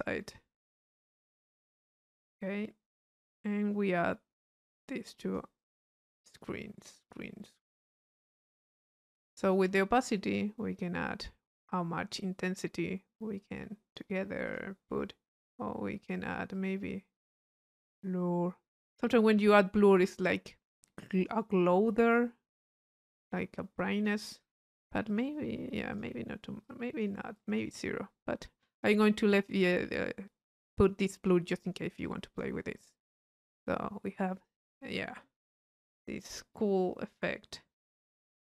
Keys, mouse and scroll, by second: 0.6 click, 1.6 click, 4.7-6.0 drag, 6.3 click, 7.7 click, 8.2 click, 9.4 click, 10.3-14.2 drag, 14.5 click, 15.4-16.4 drag, 16.5-21.5 drag, 22.1 click, 23.2-24.3 drag, 25.1 click, 25.9 click, 26.6-27.8 drag, 28.7 click, 31.5-32.7 drag, 33.2 click.